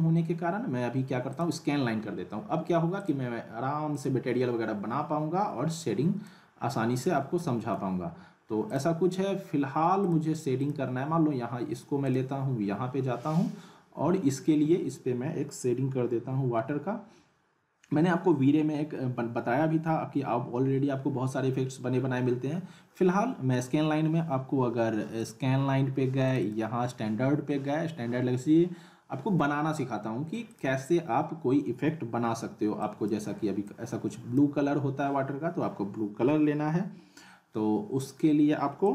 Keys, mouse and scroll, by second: 1.3 click, 6.7 middle click, 8.7 click, 14.2 click, 25.2 click, 30.5 click, 32.8-34.6 drag, 38.8 click.